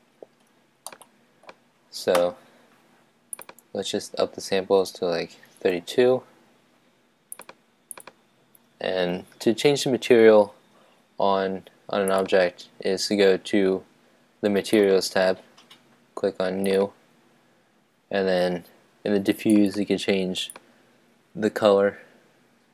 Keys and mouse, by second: 0.0 Escape, 0.0 middle click, 0.8-2.1 middle drag, 3.5-7.7 drag, 7.9-9.7 drag, 12.1-18.6 drag, 19.5-21.3 drag.